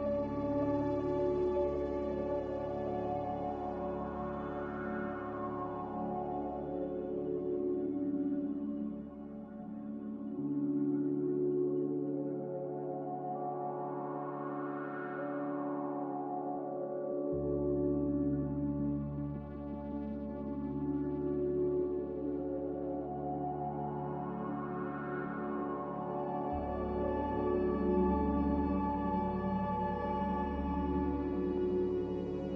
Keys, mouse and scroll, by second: 14.6 click, 16.3 click, 18.2 ctrl+z, 21.8 click.